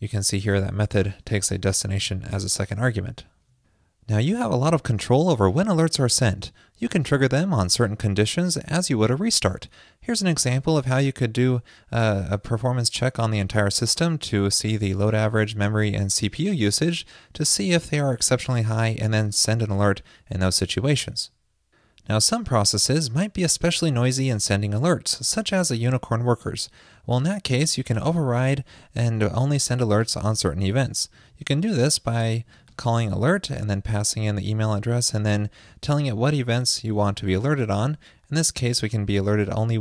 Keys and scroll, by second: 10.8 super+v, 31.3 super+v.